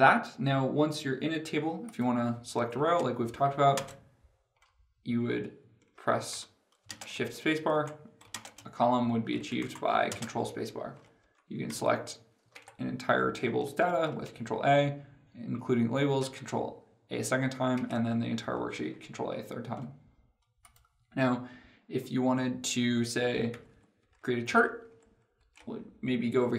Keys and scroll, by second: 3.5 ctrl+space, 10.0 ctrl+space, 13.8 ctrl+a, 23.4 ctrl+Page_Down.